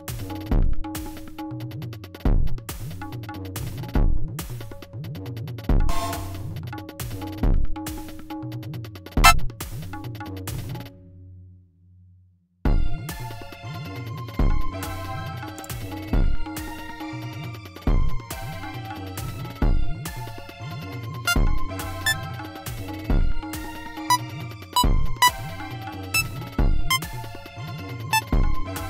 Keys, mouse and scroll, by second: 1.8 click, 3.3 g, 3.5 click, 3.8 right click, 5.1 click, 5.9 space, 6.5 click, 6.6 space, 7.8 space, 8.2 e, 8.8 e, 9.1 click, 10.1 scroll down 2, 10.3-11.9 scroll up 2, 11.9-12.5 scroll up 2, 13.7 d, 16.0 click, 17.3 g, 17.5 click, 18.4 click, 19.8 d, 21.2 click, 22.0 click, 22.6 click, 22.8 click, 23.3 click, 24.0 click, 24.7 click, 25.1 click, 25.9 click, 26.6 click, 28.0 click, 28.6 click.